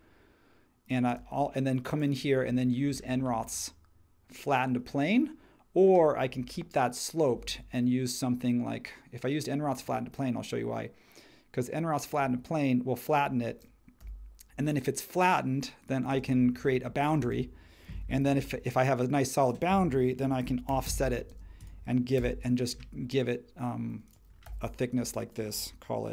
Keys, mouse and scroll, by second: 1.1 space, 14.0 l, 16.1 space, 18.1 f, 19.6-22.2 typing, 24.4 p.